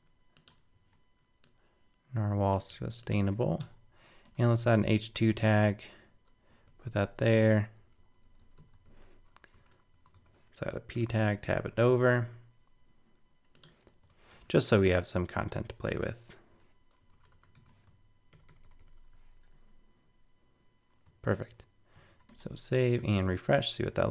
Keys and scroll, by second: 2.7 super+c, 5.5 super+v, 8.8 super+Left, 10.9 super+], 14.3 alt+super+., 15.6 super+Left, 18.3 super+], 22.0 super+s, 22.3 super+Tab, 23.0 super+r.